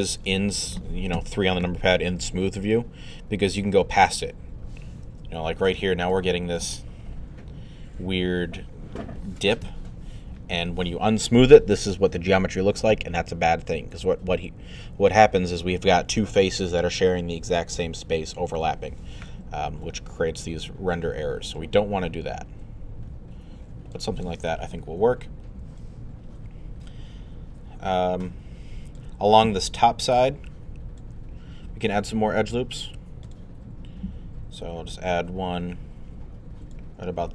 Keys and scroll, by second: 1.2 3, 9.6 1.